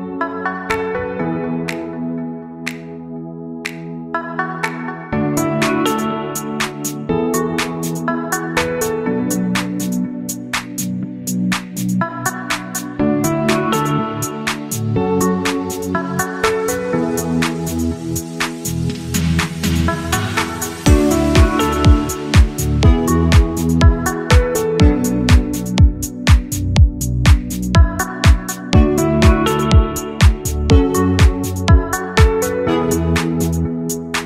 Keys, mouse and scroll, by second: 0.9 click, 2.4 click, 4.1 right click, 5.0 Tab, 6.2 1, 6.5 click, 7.0-9.6 right drag, 9.9 a, 11.2 shift+z, 13.1 click, 13.7 click, 14.2 alt+click, 15.0-16.8 drag, 17.2 Tab, 17.2 typing, 22.0 click, 22.9 g, 25.7 click, 30.8-31.9 middle drag, 31.9 click, 33.2-34.2 drag.